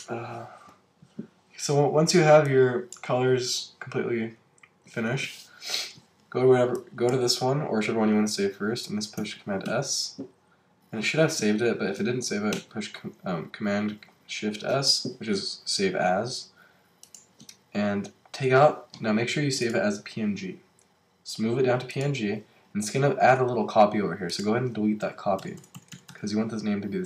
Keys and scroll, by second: 9.7 super+s, 12.5 shift+super+s, 25.0 Left.